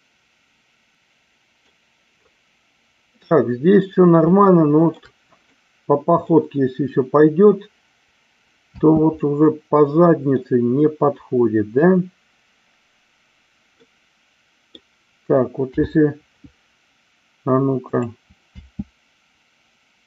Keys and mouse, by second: 0.9-1.7 middle drag, 0.9 space, 4.3-4.9 shift+middle drag, 5.4-6.3 middle drag, 8.8 space, 9.2-10.3 middle drag, 13.7-14.7 middle drag, 15.5 KP_7, 17.8 click, 18.5 space.